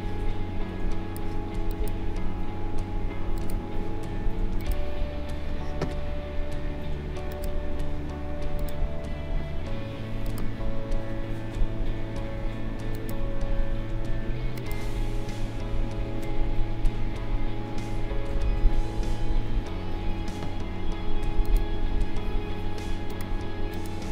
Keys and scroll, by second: 18.5 ctrl+[.